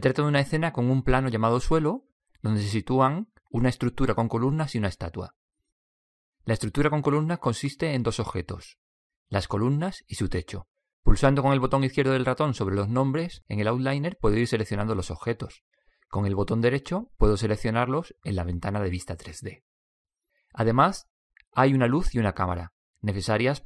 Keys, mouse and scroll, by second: 12.2-17.8 drag, 18.4-22.5 right drag, 22.8-23.6 right drag.